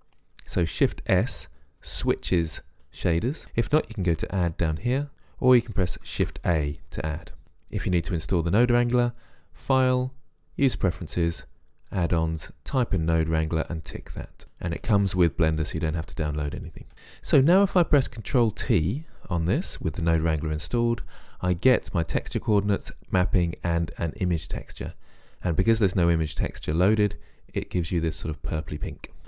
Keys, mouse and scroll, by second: 4.4 click, 6.1 shift+a, 17.1-18.8 right drag, 19.9 ctrl+t.